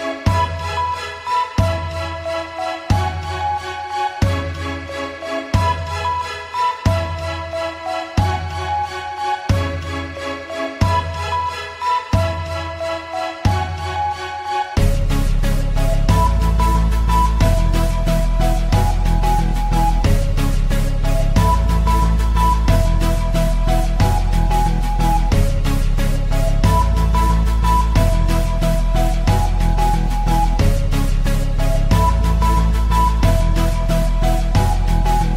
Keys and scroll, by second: 1.6 shift+Page_Up, 4.5 shift+Page_Up, 5.1 Escape.